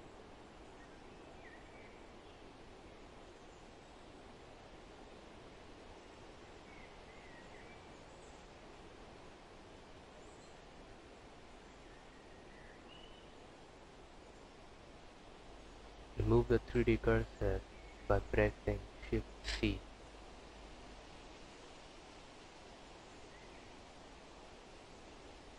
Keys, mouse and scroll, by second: 0.7 r, 2.8 g, 4.3 r, 5.1 scroll down 7, 5.5 s, 7.0 click, 7.8 click, 10.4 scroll down 7, 10.8 click, 11.2 scroll up 3, 12.1 click, 18.5 shift+c, 20.9 click, 23.2 click, 24.2 KP_Decimal, 24.8 click, 25.3-25.5 scroll down 12.